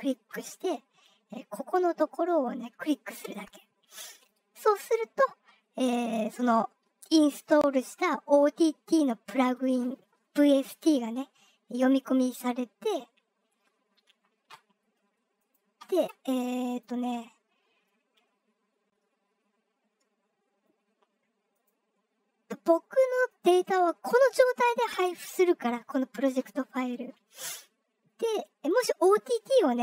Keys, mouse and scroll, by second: 3.2 click, 15.3 click, 16.6 click, 21.5 click, 23.2 click.